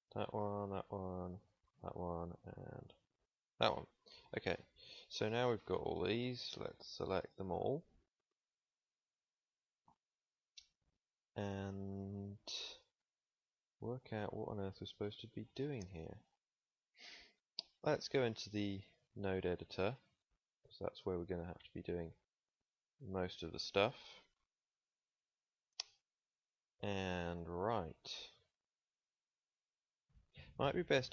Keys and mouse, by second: 4.9 ctrl+s, 12.2 ctrl+s, 18.4 middle click.